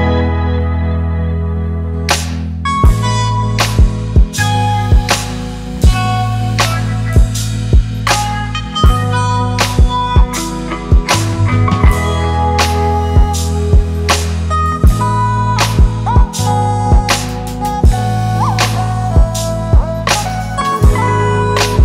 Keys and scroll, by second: 5.2-7.1 typing, 9.1 Return.